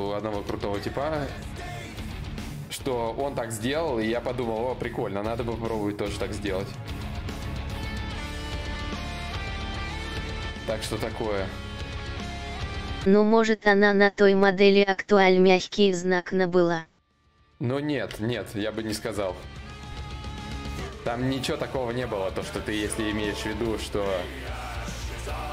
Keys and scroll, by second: 8.9 4, 13.5 d, 14.1 shift+d, 15.1 shift+d, 19.3 shift+d, 21.8 d.